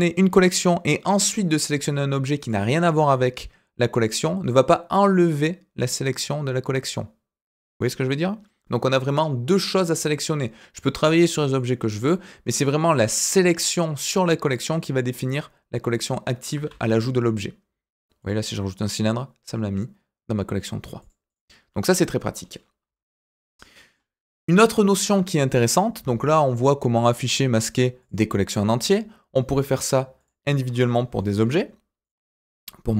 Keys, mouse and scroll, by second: 2.4 click, 10.7 click, 11.1 click, 11.5 click, 12.8 click, 14.4 click, 16.7 shift+a, 21.0 click, 21.2 click, 22.8 Delete, 23.4 scroll down 2, 23.6 middle click, 28.0 click, 28.4 click, 29.6 click, 30.2 click, 30.7-31.1 scroll up 2, 31.1 shift+middle click, 32.0 click.